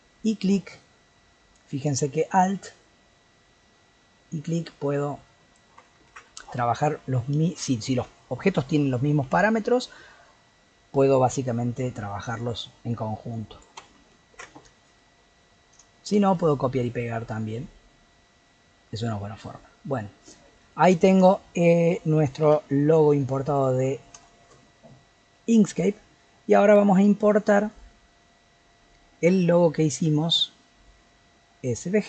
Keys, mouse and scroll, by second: 1.8-4.9 alt+drag, 6.1 ctrl+z, 11.8-14.3 alt+drag, 14.3 ctrl+z, 15.0-18.9 middle drag, 18.9 scroll down 1, 19.2-21.0 middle drag, 21.0 shift+click, 21.9 g, 23.7 middle click, 24.6 scroll down 1, 24.9-27.7 middle drag, 27.7-30.8 drag.